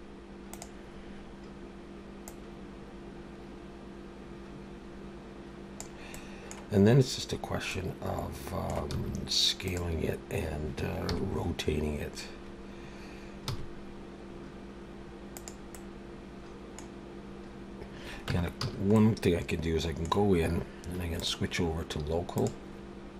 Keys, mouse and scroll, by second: 2.3 click, 6.1 middle click, 7.7 middle click, 8.9 s, 11.1 KP_3, 11.7 scroll up 2, 13.5 r, 15.7 middle click, 18.3 Tab, 18.6 a, 18.9 middle click, 21.2 click.